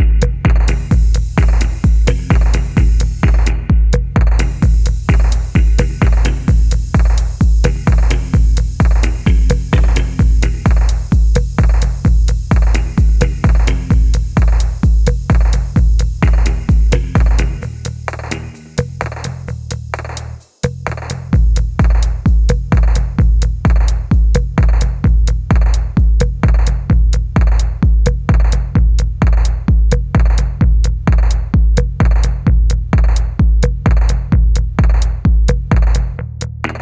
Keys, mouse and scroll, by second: 0.6 middle click, 0.6 r, 2.0 middle click, 2.1 typing, 2.4 scroll up 1, 2.7 middle click, 3.3 typing, 5.1 middle click, 7.0-7.8 typing, 10.5 middle click, 12.0 double click, 13.3-13.6 scroll down 1, 13.7 shift+middle click, 16.4 double click, 18.8 double middle click, 23.4 middle click, 25.1-27.0 scroll up 1, 27.0 middle click, 27.3-28.0 scroll down 3, 27.6 shift+middle click, 28.0 middle click, 29.2 middle click, 31.0 shift+super+Left, 33.1 middle click, 33.7 middle click, 35.1 middle click, 35.2 shift+super+Left.